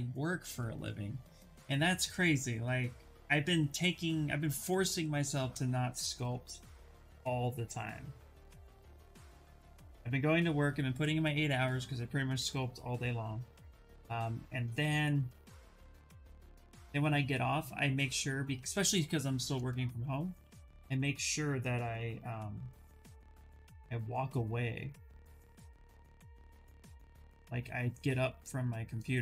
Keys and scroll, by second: 17.2 s, 22.0 s.